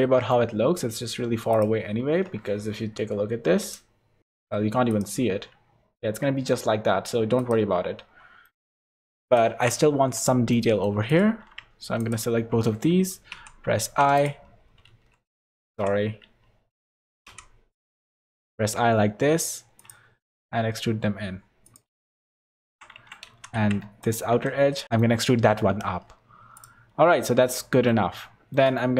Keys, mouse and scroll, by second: 0.8 middle click, 1.5 click, 2.0-2.5 scroll down 14, 2.9 KP_0, 3.6 scroll up 2, 3.6 KP_0, 4.2 click, 4.9 click, 7.4 click, 8.0-8.6 scroll up 3, 8.4 middle click, 8.8 scroll down 5, 9.2 click, 9.5 Tab, 9.9 3, 10.1 click, 10.5 middle click, 11.1 click, 12.0 shift+click, 13.3 i, 14.9 ctrl+z, 15.7 i, 20.3 e, 22.1 3, 22.6 Tab, 23.0 Tab, 23.3 3, 23.5 alt+a, 24.0 alt+shift+click, 24.8 e, 25.4 Tab, 25.9 middle click, 26.5 click, 26.9-27.2 scroll down 5, 27.2 middle click, 28.1 shift+middle click, 28.8 middle click.